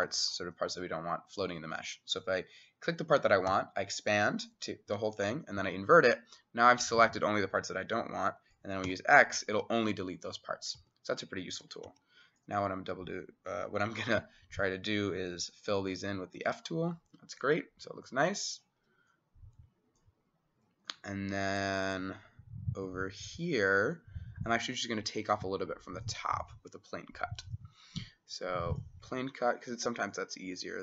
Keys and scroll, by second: 3.5 e, 4.9 i, 8.9 x, 10.8 Escape, 11.7 d, 12.1 s, 15.9 f, 17.9 Escape.